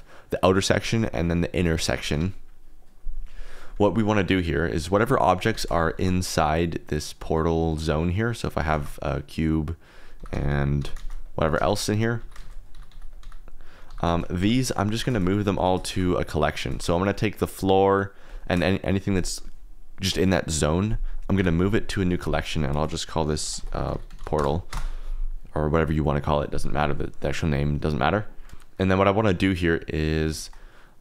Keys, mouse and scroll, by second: 0.7 Escape, 1.0 click, 1.2 click, 1.5 g, 2.1 Escape, 4.2 drag, 4.7 shift+click, 4.9 shift+a, 5.7 shift+click, 5.9 shift+a, 8.4 x, 8.7 shift+a, 10.1-15.9 typing, 10.6 click, 11.2 click, 11.8 click, 12.2 alt+d, 13.1 click, 13.6 click, 14.8 click, 15.4 click, 16.3 click, 17.0 shift+click, 17.3 shift+click, 18.2 shift+click, 18.7 click, 21.3 m.